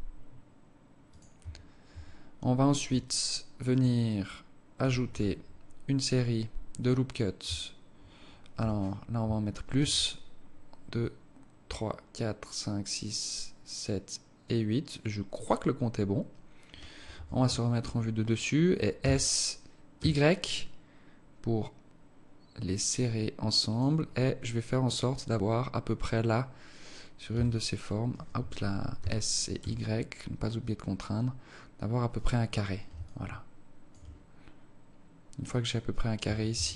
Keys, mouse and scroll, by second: 1.3 Tab, 2.5 Tab, 2.9 alt+click, 3.9 alt+click, 5.0 z, 8.5 z, 9.7 ctrl+r, 17.1 KP_7, 19.0 s, 24.0-25.7 scroll up 4, 27.3 s, 29.1 s, 33.1 alt+shift+click, 36.2 Tab, 36.5 Tab.